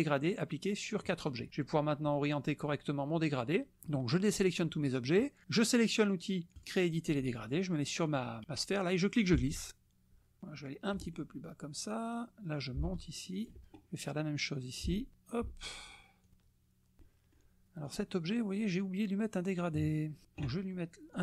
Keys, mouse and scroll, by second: 3.3 click, 6.5 click, 8.1 click, 9.3-11.1 ctrl+drag, 12.6-13.7 ctrl+drag, 14.8 ctrl+click, 16.2-17.5 ctrl+drag, 17.8 click, 21.1 click.